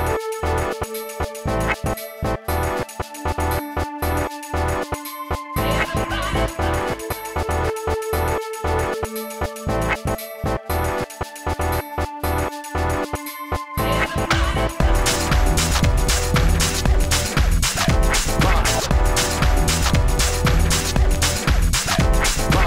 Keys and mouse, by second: 3.9 middle drag, 6.1 s, 6.2 f, 6.5-7.2 drag, 7.2 f, 8.1 f, 8.4 s, 9.4-9.9 drag, 9.4 f, 10.6-11.9 typing, 15.7 s, 20.0 f, 20.7 f, 21.8 s.